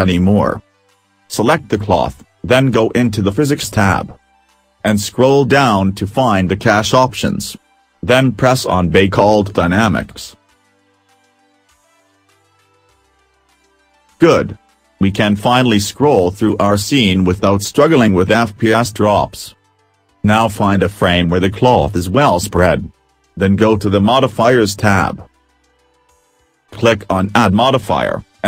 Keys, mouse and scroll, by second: 1.1 click, 5.1-7.2 scroll down 15, 7.5-8.0 scroll down 2, 15.3 right click, 20.1 middle click, 20.4 scroll up 2, 20.5 middle click, 21.5 right click, 22.3 middle click, 22.7 scroll up 3, 22.9 middle click, 25.4 click.